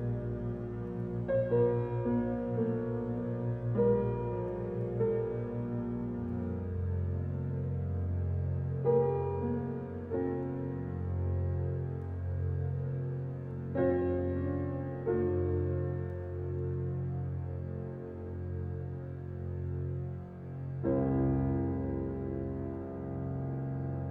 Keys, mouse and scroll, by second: 0.8-1.9 scroll up 1, 2.6-3.0 typing, 3.0 scroll down 1, 4.4 scroll up 1, 5.1 click, 6.2 scroll down 1, 6.7-7.2 scroll up 1, 7.4 m, 8.6 Return, 17.5 click, 17.9-18.6 scroll down 1, 18.7 scroll up 1, 19.1-19.5 scroll down 1, 20.0 click, 20.4-21.9 scroll up 1.